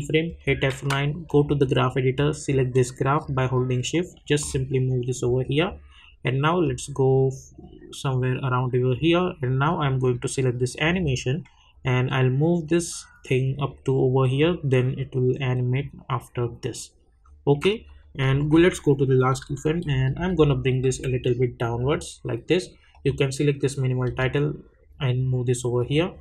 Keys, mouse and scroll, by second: 0.2 F9, 1.3-17.9 drag, 4.0 shift+click, 12.8 click, 18.4 k, 19.4 Down, 21.8 click, 24.0 Up, 25.8 click.